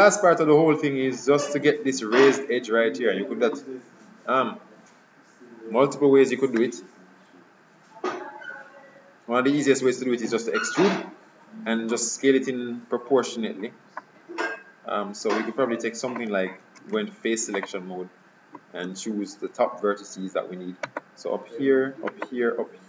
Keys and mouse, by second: 0.1 KP_3, 9.1-11.2 middle drag, 14.0-15.8 middle drag, 16.9 ctrl+Tab, 19.0 KP_3, 20.9-22.8 right drag.